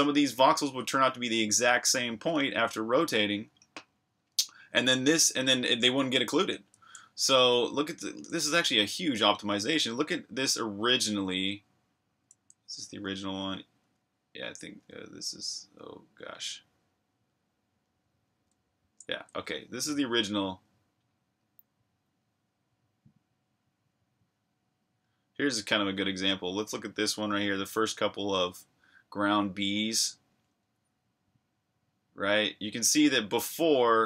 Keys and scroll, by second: 7.4 super+Tab, 12.5 super+`.